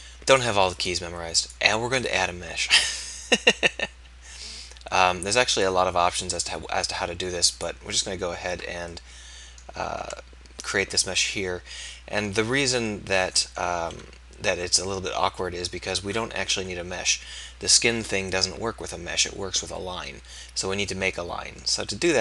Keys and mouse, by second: 0.9 click, 10.1 Tab, 14.0 KP_1, 14.5 KP_3, 15.1 KP_1, 16.6 KP_8.